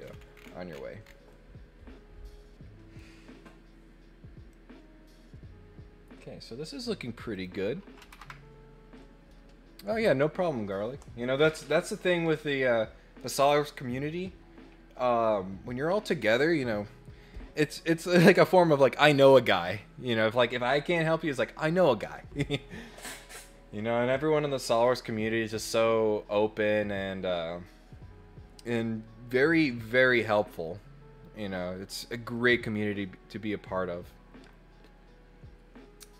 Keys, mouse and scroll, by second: 0.0-0.3 scroll up 4, 0.3-1.1 scroll down 6, 1.3-2.9 middle drag, 4.4-6.7 middle drag, 7.3 click.